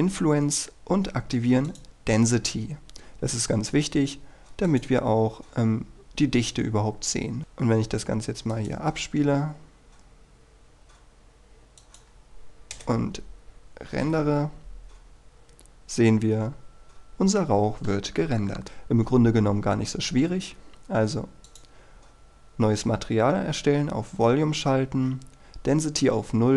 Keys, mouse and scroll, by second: 12.8 KP_0, 14.2 F12, 16.9-20.5 scroll up 1, 21.6 click, 24.4-26.5 scroll down 1.